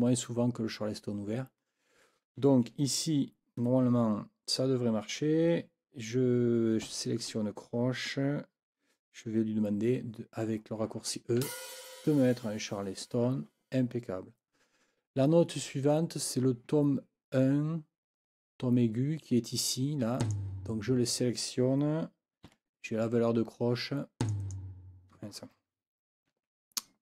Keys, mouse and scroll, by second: 6.9 4, 11.4 e, 20.2 click, 22.5 4, 24.2 click, 26.3 ctrl+z.